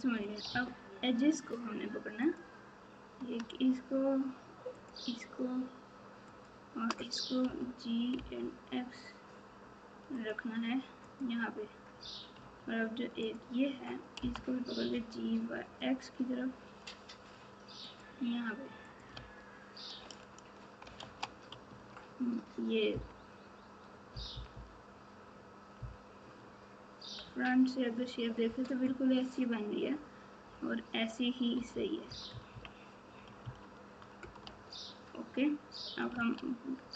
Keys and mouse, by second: 2.2 click, 4.7 shift+click, 7.5 g, 11.0 click, 13.2 click, 14.1 g, 18.9 click, 19.1 alt+z, 21.1 alt+z, 21.7 Tab, 22.9 KP_4, 24.1 KP_4, 24.3 KP_4, 24.5 KP_4, 25.8 KP_1, 31.7-33.4 typing, 36.1 alt+z.